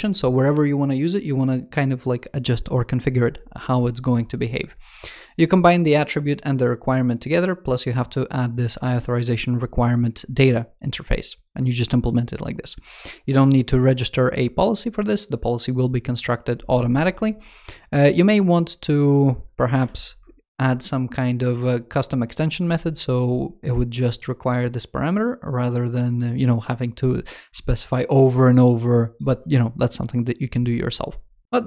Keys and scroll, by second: 19.5 shift+super+Right.